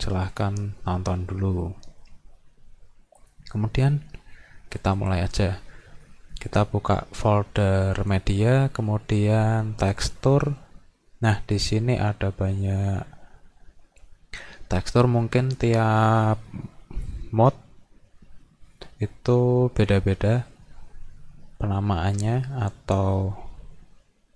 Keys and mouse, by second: 4.8 click, 5.0 click, 8.0 click, 9.9 click, 10.0 click.